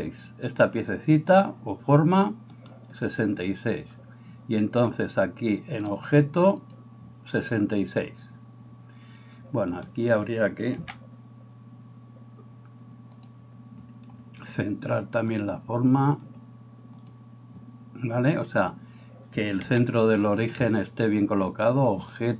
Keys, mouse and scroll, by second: 2.5 right click, 2.7-5.7 middle drag, 5.7 click, 5.9-6.7 middle drag, 6.7-13.2 drag, 9.8-22.3 middle drag, 9.8 right click, 10.8 s, 15.4-22.3 drag, 19.7 r.